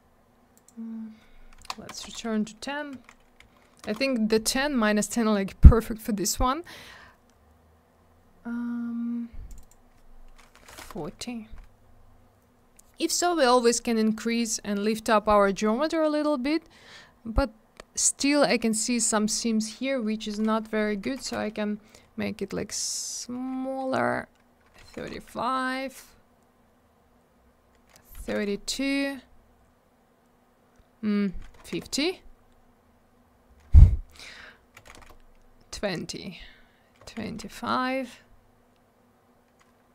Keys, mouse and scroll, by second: 0.6 click, 1.9 BackSpace, 2.9 1, 3.4 0, 3.8 Return, 6.2-6.8 scroll up 1, 6.9 scroll down 1, 9.5 click, 9.5 click, 9.6 click, 9.6 double click, 10.3-11.2 typing, 16.3 scroll up 1, 21.3 Return, 24.8 3, 25.1 Return, 28.3 2, 28.4 Return, 31.8 Return, 34.9 Return.